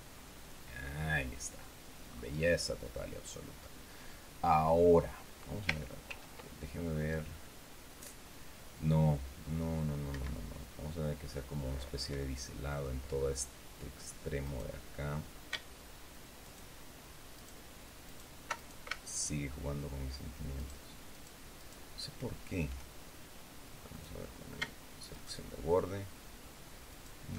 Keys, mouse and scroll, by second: 0.1-0.6 scroll down 2, 1.2-1.6 scroll down 2, 2.0-2.6 scroll up 2, 3.6 scroll down 2, 6.0 ctrl+r, 10.0 Escape, 11.1-11.5 scroll down 2, 12.1 middle click, 13.0-13.4 scroll up 2, 14.3 right click, 16.3 alt+shift+right click, 17.3 alt+shift+right click, 17.9 alt+shift+right click, 18.5 alt+shift+right click, 19.0 alt+shift+right click, 20.5 alt+shift+right click, 21.0 alt+shift+right click, 21.5 alt+shift+right click, 23.8 click, 25.0 alt+shift+right click, 26.8 alt+shift+right click.